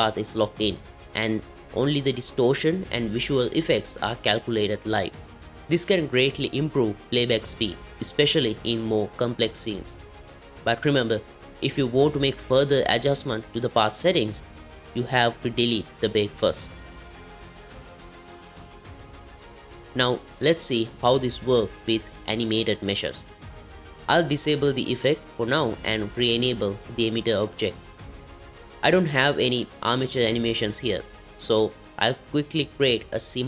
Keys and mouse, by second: 1.3 click, 4.8 click, 6.5 space, 10.7 space, 13.1 click, 15.6 click, 16.9 click, 17.7-19.0 drag, 24.1 click, 25.3-26.7 drag, 27.5 click, 28.2 click, 32.2 click.